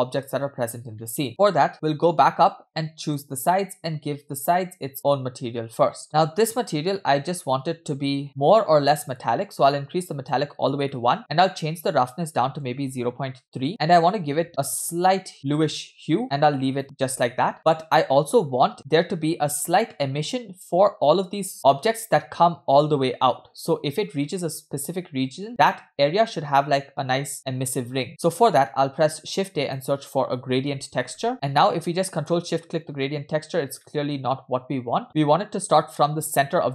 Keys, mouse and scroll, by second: 1.0 middle click, 1.9-2.3 scroll up 5, 3.1 click, 6.0 middle click, 6.0 scroll down 4, 6.3-8.2 scroll up 3, 8.2 middle click, 9.2-10.4 drag, 10.9 middle click, 11.5-13.3 drag, 13.7 middle click, 14.5 click, 17.5 middle drag, 17.5 scroll down 3, 18.4-18.7 scroll up 2, 18.7-19.9 scroll down 2, 20.0-20.8 middle drag, 28.4 scroll up 1, 28.5 middle click, 28.9 shift+a, 32.4 ctrl+shift+click, 33.8-35.0 middle drag.